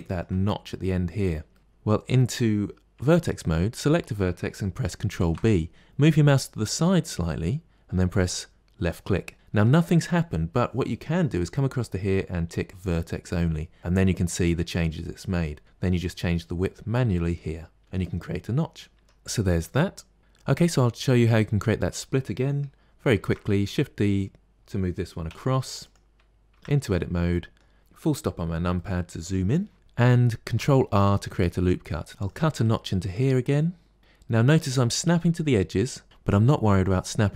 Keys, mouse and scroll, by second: 2.8 1, 3.6 click, 5.0 ctrl+b, 12.8 click, 15.5-16.8 drag, 19.0 Tab, 19.3 middle click, 23.1 shift+d, 26.4 Tab, 26.8 middle click, 27.8 KP_Decimal, 28.1 scroll down 7, 28.6-30.3 middle drag, 30.3 ctrl+r, 31.4 middle click, 32.1 k.